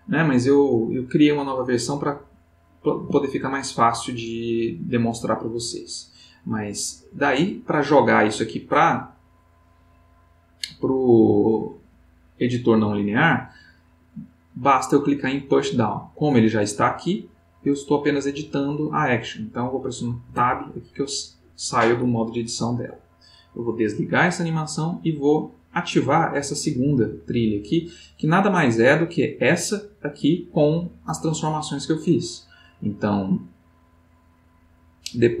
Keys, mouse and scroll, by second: 3.0 Tab, 20.3 Tab, 23.5 click, 25.0 click, 26.4 click, 35.3 click.